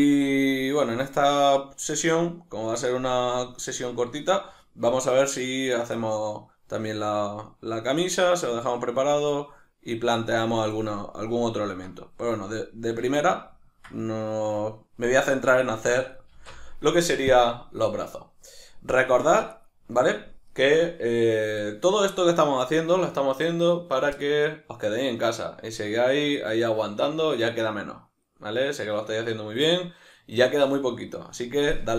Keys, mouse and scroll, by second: 16.3 alt+q, 18.9-19.5 drag, 19.5 right click.